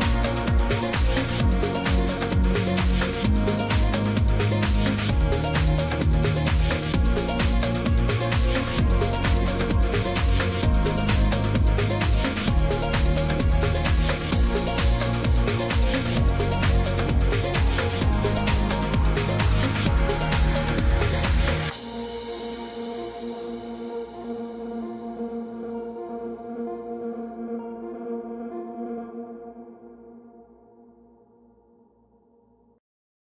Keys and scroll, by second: 24.2 ctrl+z.